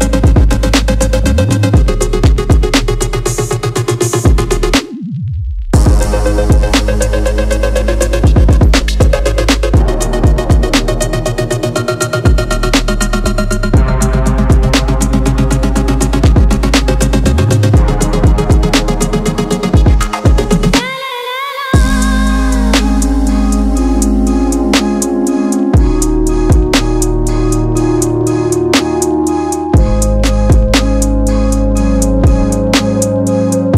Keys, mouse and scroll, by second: 2.1 Tab, 9.7 click, 10.5 a, 13.6-16.1 drag, 17.9 click, 19.4 click, 20.3 click, 21.3 shift+a, 25.5 click, 27.7-32.9 drag.